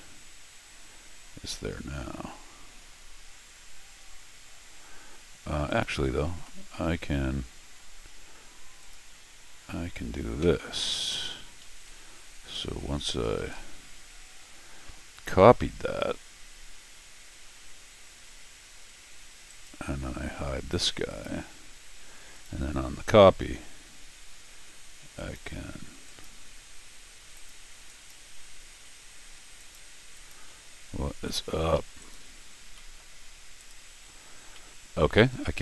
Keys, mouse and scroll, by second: 5.7 click, 6.3 ctrl+z, 7.2-19.6 right drag, 8.8 click, 9.7 middle click, 11.1 click, 13.4 ctrl+alt+r, 21.1 click, 22.3 click, 22.9 middle click, 25.2 click, 26.0 click, 27.3 click, 27.9 click, 28.8 Tab, 29.6 click, 30.1 click, 31.3 Escape, 31.5 Escape, 31.7 Escape, 32.0 click, 32.6 scroll up 2, 32.7 middle click, 33.6 click, 34.4 scroll down 1, 34.5 middle click.